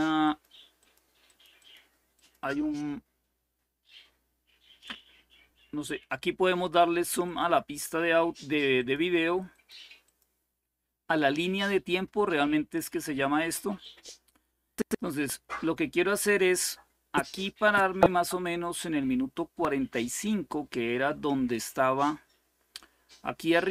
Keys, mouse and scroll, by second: 0.0-2.8 drag, 6.3 click, 7.4 click, 7.7 click, 8.5 click, 9.7 click, 13.5-23.7 drag.